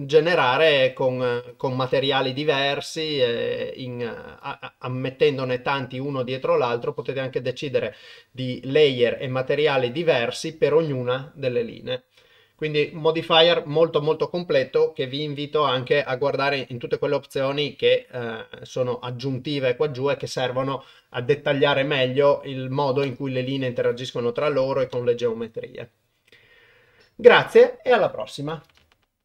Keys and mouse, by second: 0.6-1.7 drag, 4.5 click, 10.0 click.